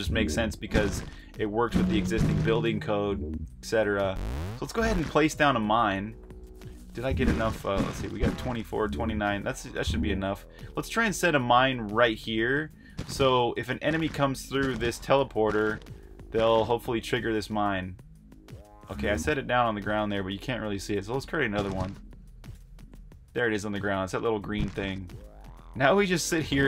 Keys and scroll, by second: 0.0-3.7 typing, 4.8-9.7 typing, 12.6 typing, 13.8-16.1 typing, 17.4 f, 18.6-25.9 typing.